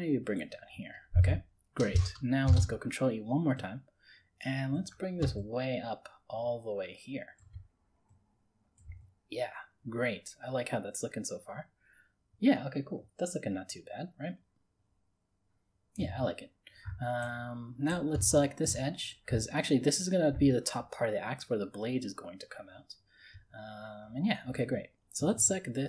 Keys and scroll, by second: 2.5 ctrl+e.